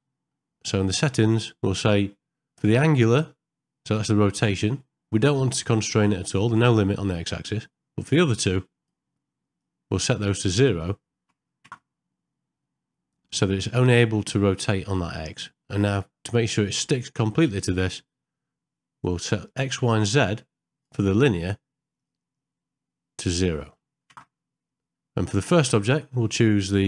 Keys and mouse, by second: 1.1 middle click, 9.6-11.7 drag, 13.8 middle click, 15.4 middle click, 16.6 middle click, 19.5 click, 22.0-24.2 drag.